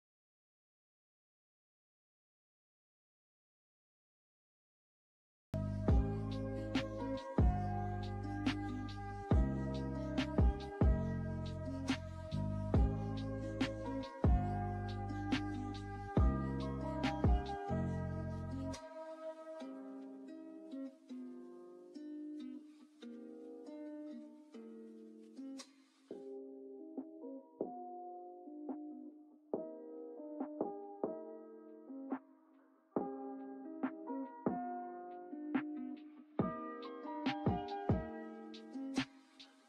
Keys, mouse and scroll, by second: 11.2 shift+click, 15.4 click, 18.5 click, 25.4-33.4 shift+drag, 33.8-39.6 shift+drag.